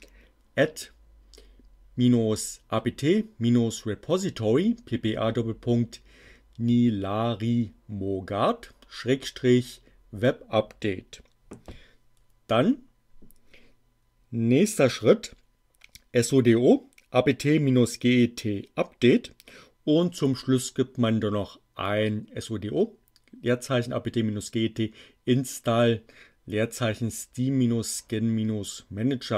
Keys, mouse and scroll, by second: 12.6 Down, 20.3 Down.